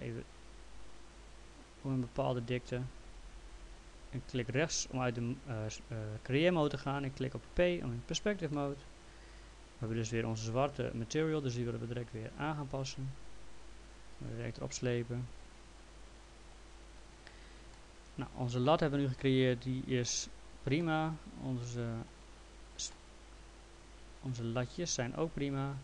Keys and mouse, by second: 1.5 click, 4.3 right click, 7.4 p, 8.5 alt+middle click, 11.4 click, 12.8 click, 14.1 click, 15.3 click, 16.9 click, 17.8 alt+middle click, 19.2 middle click, 20.1 middle click, 23.0 middle click.